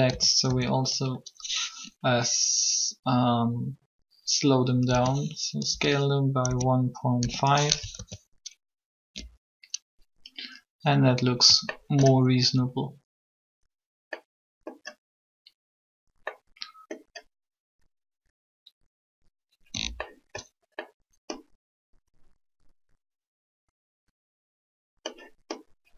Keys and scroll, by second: 0.1 shift+a, 0.4 shift+a, 4.6-8.0 typing, 9.1 alt+a.